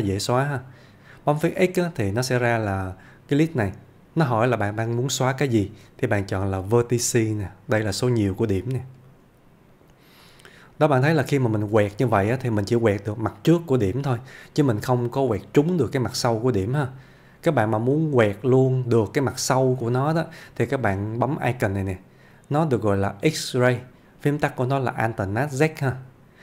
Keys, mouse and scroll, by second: 9.1 click, 10.3-10.9 middle click, 14.9-15.5 click, 16.3-17.5 middle click, 19.5 scroll up 1, 19.8-20.4 click, 25.7 click.